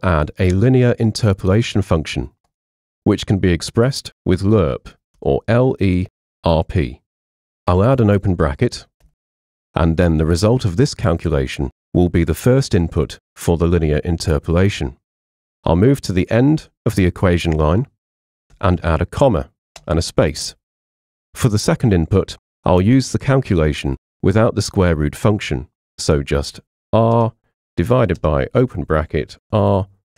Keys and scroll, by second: 4.9-6.8 typing, 9.1 shift+9, 18.6 [, 19.8 space, 26.8-30.1 typing.